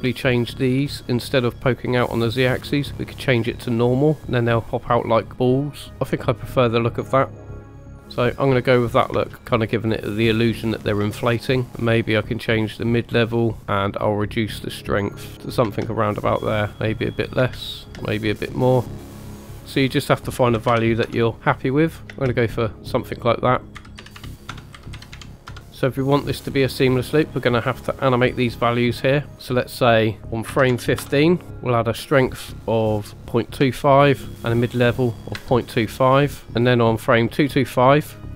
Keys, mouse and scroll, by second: 0.8 click, 2.2-3.4 drag, 4.2-4.8 middle drag, 5.9 scroll up 3, 5.9 space, 8.0 middle click, 8.0 scroll down 3, 9.1 space, 9.4 middle click, 11.0 space, 11.7 space, 11.8 click, 14.5 click, 15.6 space, 16.8 click, 17.4 space, 17.9 space, 18.8 click, 19.0 click, 19.4 space, 19.6 space, 19.8 click, 21.7-22.1 middle drag, 22.1 space, 23.0 middle drag, 23.8 click, 24.6 middle click, 24.6 space, 30.2 click, 33.6 i, 35.3 i.